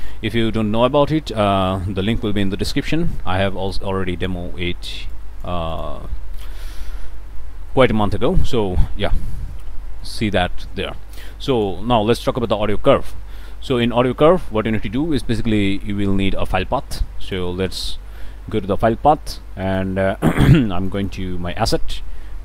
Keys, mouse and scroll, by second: 0.2 click, 3.7 click, 5.1 click, 5.7 click, 6.1 click, 6.7-7.2 scroll up 2, 7.2 click, 7.6 middle click, 8.0 click, 9.9 click, 11.3 click, 12.2 click, 13.2 click, 17.3 click, 19.6 click, 20.8 click.